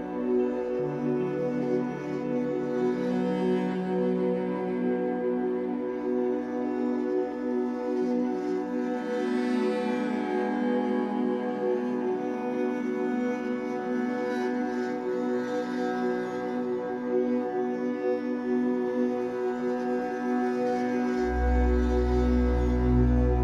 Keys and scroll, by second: 1.9 3, 3.7 w, 6.9 Escape, 8.5 3, 10.3 l, 11.1 shift+w, 12.6 3, 13.1 Return, 14.6 Escape, 17.7 shift+w, 18.5 Escape.